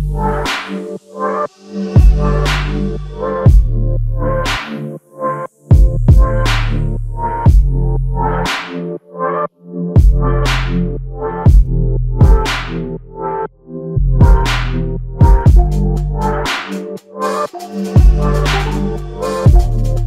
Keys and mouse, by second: 3.8 alt+m, 5.7 typing, 14.9 alt+click, 19.5 f.